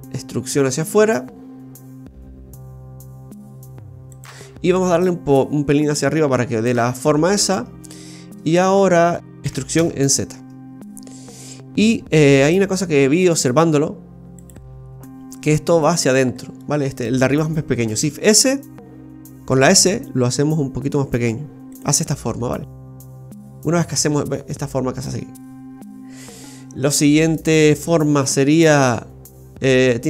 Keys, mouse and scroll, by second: 5.0 click, 7.2-7.8 scroll down 1, 8.4-9.2 scroll down 12, 9.2 shift+middle click, 9.4 e, 16.6 middle click, 18.0 shift+s, 19.5 s, 22.1-22.7 scroll down 4, 23.0 shift+middle click, 26.8 middle click, 27.5-27.8 scroll up 2, 27.8 shift+middle click.